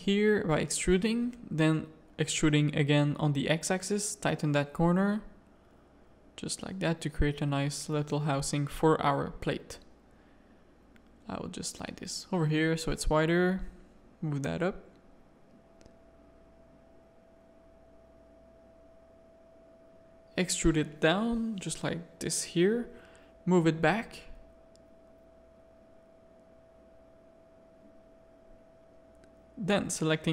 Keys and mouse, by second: 1.0 e, 2.0 a, 2.6 ctrl+r, 3.8 g, 4.9 a, 5.2 Tab, 6.8 Tab, 7.0 a, 9.9-11.3 drag, 11.4 Tab, 12.9 g, 14.8 click, 15.3 z, 16.1 Tab, 16.4 z, 16.7 a, 17.8 click, 19.2 e, 20.9 KP_3, 22.2-23.7 drag, 25.6 click, 27.2 Tab, 27.5 middle click, 28.2 Tab, 28.3 a, 28.4 middle click, 29.4 click.